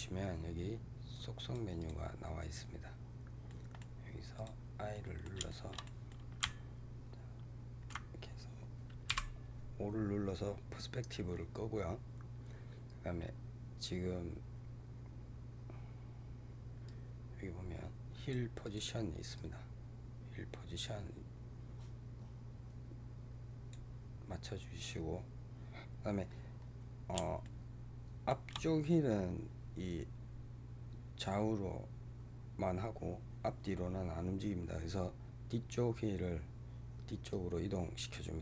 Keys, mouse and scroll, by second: 1.0-3.4 drag, 3.4-4.3 middle drag, 4.3 click, 4.8-9.0 middle drag, 9.0 KP_5, 16.7-18.6 drag, 19.2-22.2 drag, 27.3-30.3 shift+middle drag, 37.2-38.4 drag.